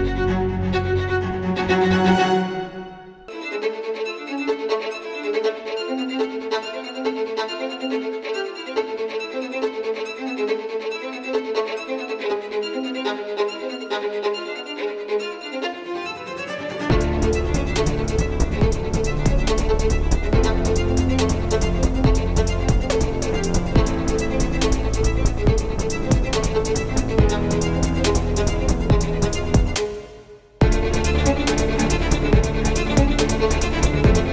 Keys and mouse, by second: 1.2-3.4 drag, 4.3 x, 6.1 KP_7, 6.6 z, 8.0 shift+a, 10.3-11.7 drag, 10.9 s, 11.7 s, 12.6 s, 14.0 click, 14.2 s, 16.2 click, 17.0 Tab, 21.2 e, 24.0 e, 26.8 Tab, 28.2-34.3 drag, 32.2 s.